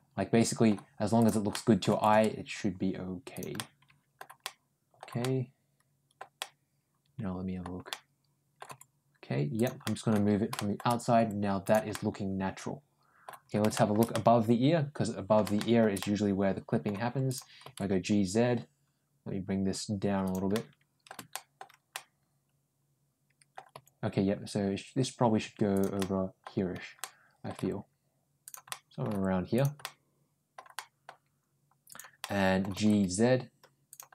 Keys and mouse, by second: 1.0 click, 1.4 middle click, 1.7 g, 3.4 middle click, 4.3 middle click, 5.0 middle click, 6.2-7.4 middle drag, 7.7 middle click, 8.5 g, 9.7 middle click, 10.4 middle click, 11.0 g, 11.7-13.1 middle drag, 13.6 middle click, 13.9-15.2 middle drag, 15.4 shift+middle click, 15.8 middle click, 17.1 click, 17.5 g, 20.4 middle click, 21.2 middle click, 21.7-23.4 middle drag, 23.6 g, 25.8 middle click, 26.8 middle click, 27.4 g, 28.5 middle click, 28.9 g, 29.7 middle click, 30.6 middle click, 31.7 click, 32.0 middle click, 32.6 g, 34.0 middle click.